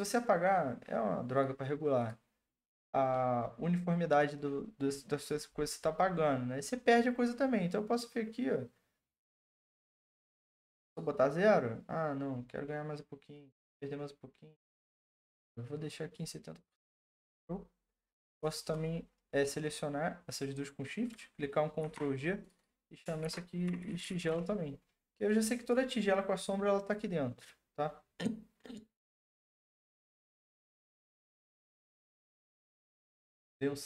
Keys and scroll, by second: 21.8 ctrl+g, 22.9-24.6 typing, 25.3 Return, 31.6 ctrl+s.